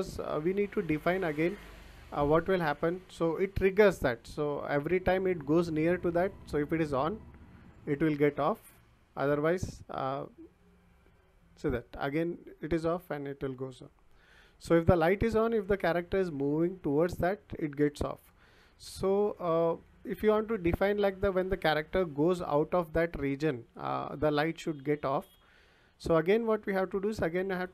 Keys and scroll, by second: 1.5 w, 4.5 s, 6.8 w, 9.0 s, 10.7 w, 12.9 s, 14.8 d, 15.5 w, 17.8 s, 19.6 Escape.